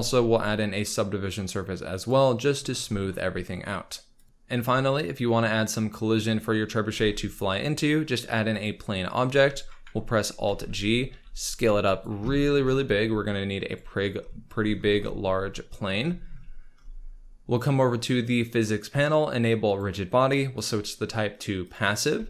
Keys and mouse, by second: 0.3-2.1 middle drag, 4.1 shift+a, 4.2 click, 4.8 shift+a, 6.9 shift+a, 10.4 alt+g, 11.1 s, 11.8 click, 12.9 s, 18.2 click, 19.8-21.7 drag, 22.1 z.